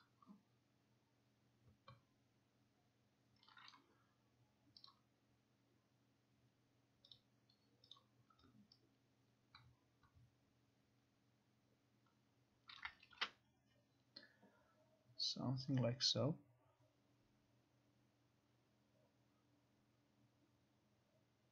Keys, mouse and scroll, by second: 3.8 click, 4.9 click, 7.3 click, 8.1 click, 12.8 click, 13.2 ctrl+r.